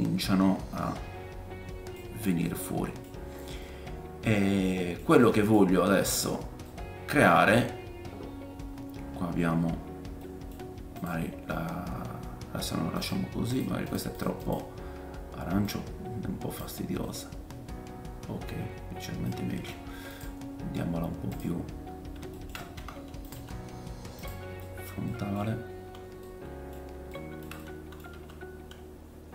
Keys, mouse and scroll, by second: 5.7-6.5 scroll up 1, 6.5 scroll up 4, 8.4-9.4 scroll up 2, 9.4 scroll up 1, 9.5 scroll down 1, 11.0 click, 11.1-14.2 right drag, 13.0 click, 13.0 middle click, 13.5 middle click, 13.8 click, 13.8 middle click, 14.2-21.4 drag, 14.4 middle click, 14.4 right click, 17.0 middle click, 19.3-20.1 scroll down 2, 20.1 middle click, 20.1 right click, 20.1 scroll down 4, 21.3 middle click, 21.3 right click, 21.6-22.3 scroll down 3, 22.3 shift+middle click, 22.7 r, 23.3 g, 24.2-27.5 drag, 24.3-27.5 middle drag, 24.3 scroll down 1, 25.5-26.2 scroll up 4, 28.1 g.